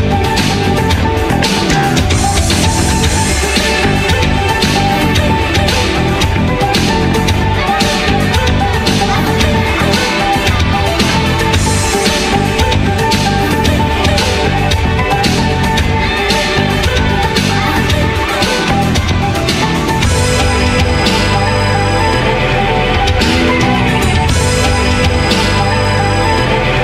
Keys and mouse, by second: 0.2 ctrl+t, 1.1 Tab, 2.1 Tab, 3.3 x, 3.7 Tab, 4.5 q, 4.9 click, 5.7 middle click, 5.8 h, 6.0 Tab, 6.5 ctrl+t, 6.9 middle click, 7.8 middle click, 8.4 s, 9.2 ctrl+t, 9.6 middle click, 10.3 ctrl+x, 10.5 Tab, 10.9 middle click, 11.3 ctrl+v, 11.6 a, 12.0 Tab, 13.6 Tab, 14.0 middle click, 14.1 Tab, 14.5 middle click, 14.7 |, 16.0 x, 16.3 Tab, 16.7 q, 17.1-18.8 middle drag, 18.8 g, 19.7 q, 20.8 ctrl+a, 23.7 a, 24.7 a, 25.2 g.